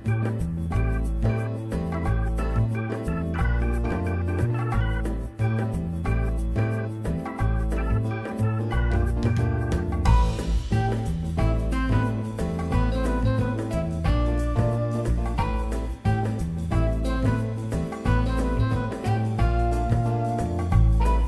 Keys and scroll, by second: 3.0 f, 3.1 z, 3.5 w, 4.0 F3, 7.5 1, 7.8 6, 8.5 BackSpace, 8.9 6, 9.1 Return, 10.0 ctrl+t, 11.7 ctrl+t, 12.2 4, 12.7 F3, 14.9 Delete, 15.5 F3, 16.7 5, 17.4 e, 18.3 r, 19.0 F3.